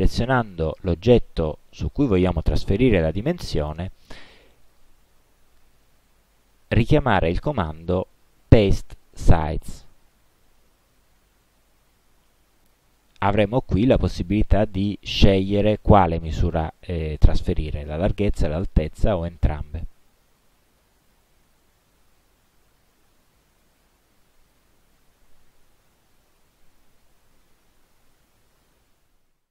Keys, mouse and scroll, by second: 0.1 click, 4.7 click, 12.7 click, 20.0-24.8 drag, 26.2 click.